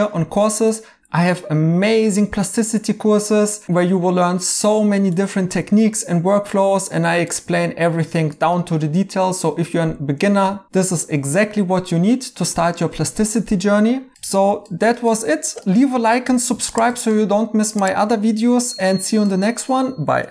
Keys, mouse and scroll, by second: 1.3 scroll down 1, 6.1-7.4 scroll down 1.